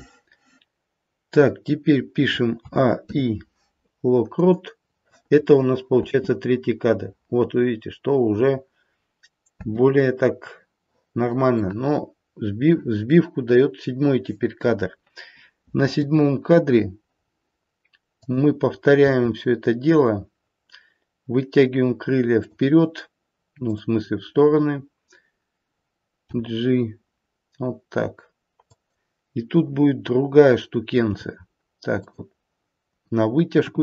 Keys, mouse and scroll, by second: 2.6 a, 2.9 i, 5.9 space, 9.7 space, 11.6 middle click, 12.1 middle click, 12.3 middle click, 12.4 middle click, 13.0 middle click, 13.4-16.0 scroll down 1, 16.0 KP_7, 17.1-18.1 scroll up 2, 18.1 click, 19.9 g, 23.7 click, 25.2-26.2 scroll down 1, 26.2 g, 31.0 g, 33.6 KP_3.